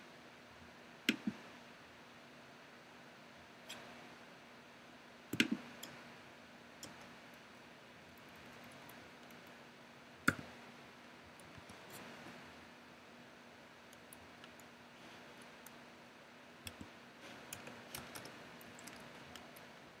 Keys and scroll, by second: 6.8 Return, 8.1 Up, 10.3 o, 11.2 super+o, 11.4 super+v, 12.0 super+Left, 12.8 Left, 14.2 Down, 15.5 Left, 17.5 Right, 17.9 BackSpace, 18.6 Right.